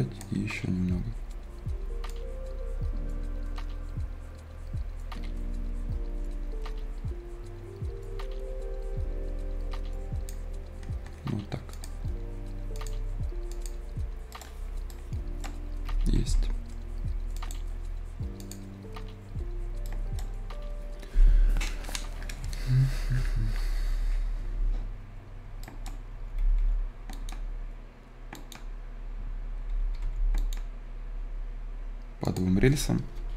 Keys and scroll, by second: 15.8 Escape, 16.3 Escape, 26.1 Escape, 29.9 Escape.